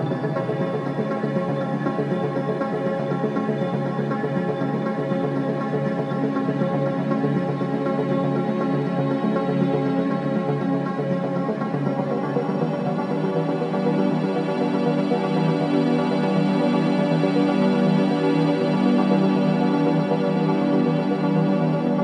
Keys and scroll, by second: 11.2 3, 14.6 ctrl+z, 18.4 shift+f.